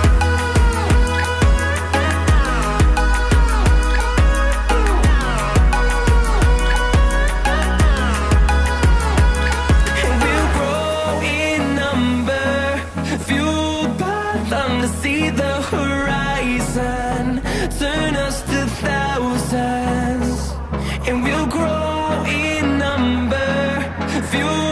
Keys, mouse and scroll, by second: 2.4 Delete, 5.4 Escape, 5.6 Escape, 17.6 double click.